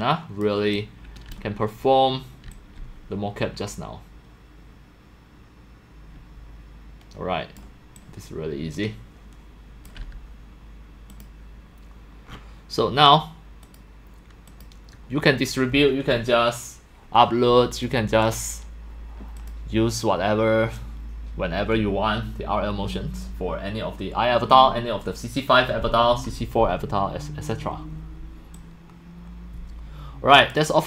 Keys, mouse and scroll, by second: 0.0-4.1 typing, 1.0 click, 2.0 right click, 2.5-7.6 drag, 8.0-9.8 drag, 11.1 click, 13.7 click, 14.5 click, 15.0 drag, 19.4 click, 28.6-30.5 drag.